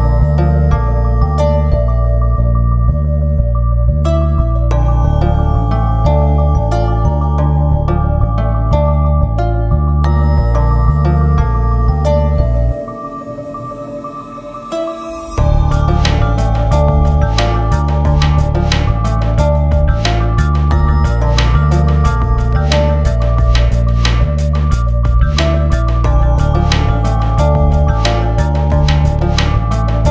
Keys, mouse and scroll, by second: 3.3 click, 4.1 click, 5.5 scroll down 1, 6.3 click, 6.6 scroll down 1, 7.1 click, 7.9 scroll down 1, 8.5 scroll down 1, 9.5 scroll up 1, 10.1-10.5 scroll up 1, 10.5 scroll down 1, 11.0 scroll up 1, 11.6 click, 11.7 scroll down 1, 11.8 scroll up 1, 12.1 scroll down 1, 12.7 click, 13.1-13.7 scroll down 1, 14.2 scroll up 1, 14.5 click, 14.7 F4, 14.9 shift+click, 15.1 click, 15.1 scroll up 1, 15.4 click, 15.6 scroll down 1, 15.7 click, 16.1 scroll down 1, 16.3 click, 16.9 F4, 16.9 click, 17.0 scroll up 1, 17.3 scroll down 1, 17.4 click, 17.5 scroll up 1, 17.6 scroll down 1, 17.7 scroll up 1, 17.8-18.2 scroll down 2, 17.9 click, 18.2 click, 18.4 ctrl+c, 18.5 click, 19.7 click, 20.1 F4, 20.1 scroll up 1, 20.3 click, 20.7 alt+space, 20.9 Return, 21.2 scroll up 1, 21.7 scroll down 1, 21.8 click, 22.2 scroll up 2, 22.3 click, 22.5 click, 22.6 scroll down 1, 22.7 click, 23.5 ctrl+s, 23.6 F4, 23.7 click, 24.1 F4, 24.2 click, 25.1 click, 25.4-25.9 scroll down 2, 25.5 click, 25.9 click, 26.4 scroll up 1, 26.5 click, 26.6 scroll down 1, 26.9 click, 27.6 scroll down 1, 28.2 s, 28.4 space, 28.5 Return, 28.9 click, 29.6 click, 30.0 click.